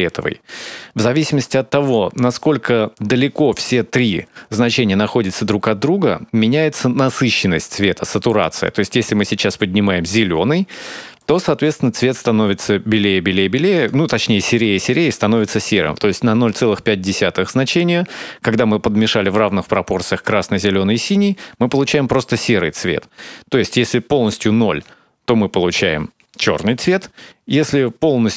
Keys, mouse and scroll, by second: 5.4 click, 13.5 click.